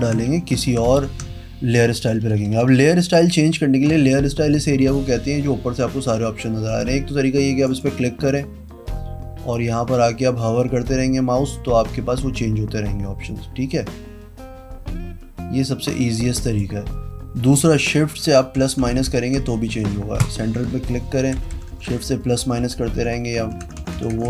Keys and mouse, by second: 0.4 v, 4.7 click, 6.6 click, 7.6 click, 16.4 click, 18.5 shift+-, 18.7 shift+=, 19.0 shift+-, 20.2 click, 21.0-24.2 typing.